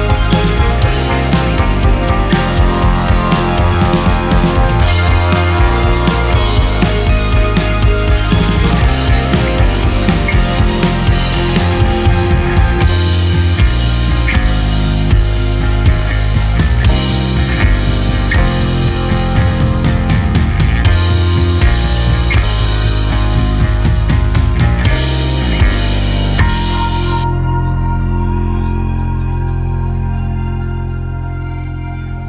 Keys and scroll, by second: 1.9 d, 5.3 z, 7.8 q, 10.3 z, 11.9 q, 17.2 n, 19.3 q, 23.2 space, 24.8 KP_1, 24.9 KP_0, 25.0 Return, 25.0 space, 25.9 space, 27.6 space, 28.2 space, 29.9 space, 30.7 space, 31.5 m.